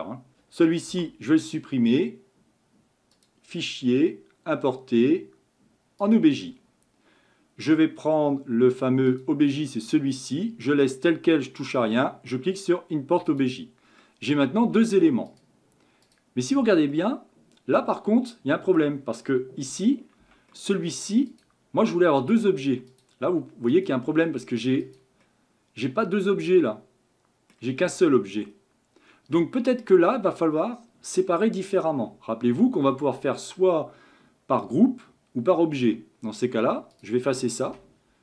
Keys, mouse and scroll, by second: 0.9 Delete, 3.1-6.4 drag, 14.0-15.3 middle drag, 15.3 click, 16.0 click, 16.9-19.7 middle drag, 19.7 Tab, 20.2 Tab, 20.5-21.3 middle drag, 21.3 click, 21.8-22.9 middle drag, 22.9 click, 23.7 click, 24.2 scroll down 1, 24.8 click, 25.2-27.9 middle drag, 27.9 scroll up 5, 28.5 scroll down 1, 36.9 click, 37.7 Delete.